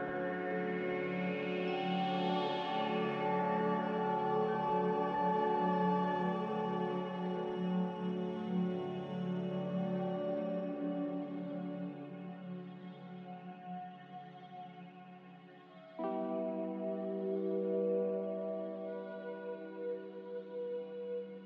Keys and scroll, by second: 5.6 x, 10.9 s, 16.1 a.